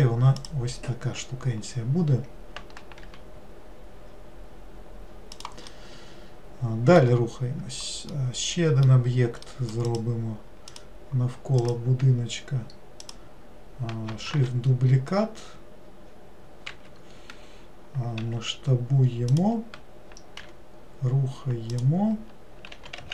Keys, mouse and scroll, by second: 0.5 click, 5.8-7.4 middle drag, 7.4-8.2 scroll down 1, 8.2-10.0 middle drag, 10.0 click, 10.8 click, 11.7 click, 13.1 click, 14.5 shift+d.